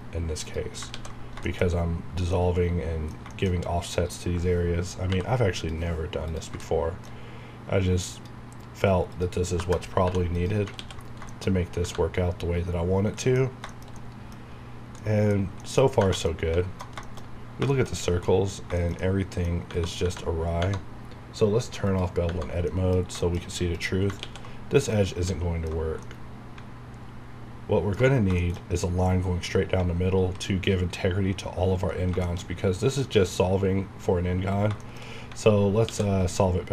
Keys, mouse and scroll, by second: 0.9 ctrl+x, 1.1-1.4 ctrl+scroll down 2, 1.4 shift+middle click, 2.3 middle click, 3.5-3.9 shift+scroll up 3, 5.0 scroll down 1, 5.1 k, 5.6 click, 6.6 shift+middle click, 8.1 click, 9.5 KP_Enter, 10.0 2, 10.3 click, 10.7 ctrl+x, 11.0 ctrl+scroll down 2, 11.3 shift+middle click, 11.6 scroll up 1, 11.8 Tab, 12.1 scroll up 1, 12.9-13.5 scroll down 2, 13.2 middle click, 13.7 shift+middle click, 14.4 scroll up 1, 15.0 middle click, 16.0 Tab, 16.2 middle click, 17.2 shift+scroll up 2, 17.9 scroll up 1, 18.2 middle click, 19.7 Tab, 20.4 scroll down 1, 20.6 Tab, 21.9 click, 22.2 Tab, 22.7 middle click, 23.4 scroll up 1, 23.7 click, 24.2 ctrl+x, 24.6 scroll down 1, 24.9 middle click, 26.0-28.3 middle drag, 28.3 scroll down 1, 28.4 shift+middle click, 32.1-32.5 scroll up 2, 32.2 shift+middle click, 34.5 scroll down 1, 34.8 shift+middle click, 35.8 x.